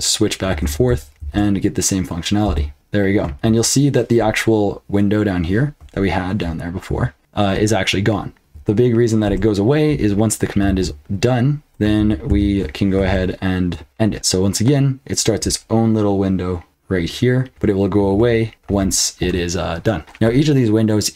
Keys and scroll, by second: 0.6 ctrl+b, 0.9 n, 1.2 ctrl+b, 2.4 n, 2.7 ctrl+b, 2.7 p, 3.2 BackSpace, 3.4 BackSpace, 8.4 ctrl+[, 8.4 h, 9.2 q, 10.6 ctrl+p, 11.7 j, 11.9 ctrl+a, 12.3 ctrl+k, 13.0 ctrl+p, 13.8 Return.